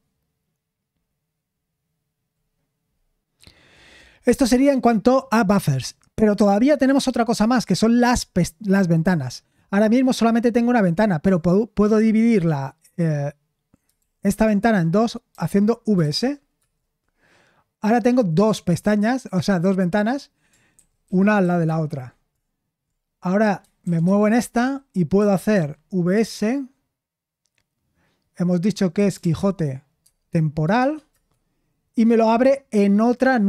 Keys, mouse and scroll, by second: 12.9 Escape, 14.0 super+l, 14.6 shift+;, 16.3-17.1 typing, 20.7 ctrl+w, 21.0 ctrl+w, 21.4 ctrl+w, 21.6 ctrl+w, 23.8 ctrl+w, 24.2 ctrl+w, 24.5-26.1 typing, 29.1-29.8 typing, 30.0 Tab, 30.8 shift+Tab, 31.1 Return.